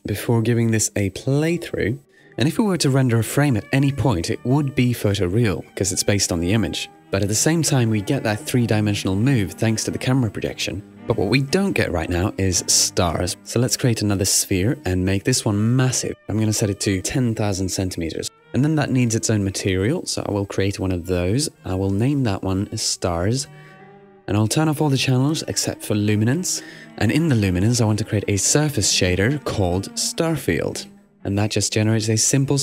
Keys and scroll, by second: 5.0 super+r, 8.5 super+r, 11.8 Home, 17.6 0, 18.3 Return, 22.3-23.4 typing.